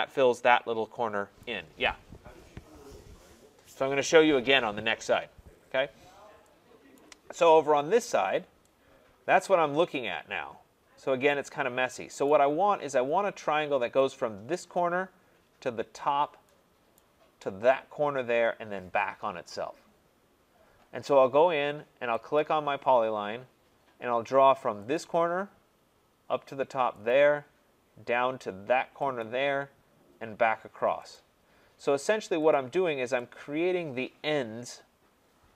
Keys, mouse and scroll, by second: 1.4 right click, 5.4 scroll, 6.0-6.4 scroll, 6.9 right click, 7.7 scroll, 11.5 middle click, 12.2 right click, 17.0 right click, 22.4 click, 24.9 click, 27.1 click, 29.2 click, 31.2 click, 32.5 click.